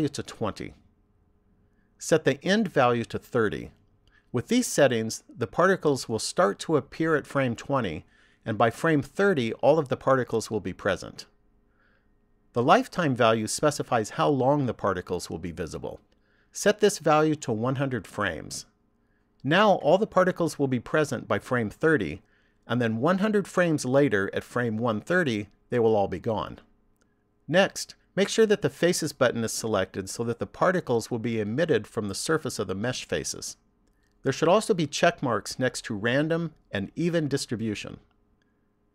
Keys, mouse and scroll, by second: 2.9 click, 16.6 click, 19.1 KP_0.